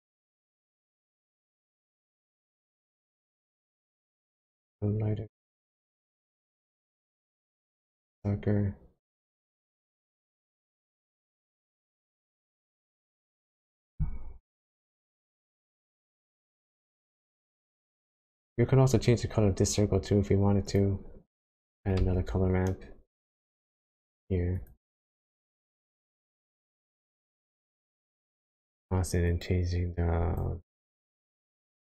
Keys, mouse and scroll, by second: 11.0 click, 11.6 click, 12.0 middle click, 13.2 middle click, 14.5 middle click, 15.8 scroll down 1, 15.9 middle click, 17.7-18.4 scroll down 1, 18.4 click, 18.7 scroll down 2, 20.0-20.7 scroll down 3, 20.7 click, 21.3 click, 21.9 shift+a, 25.7-27.2 scroll up 10, 27.2 click, 29.3 click, 31.0 click.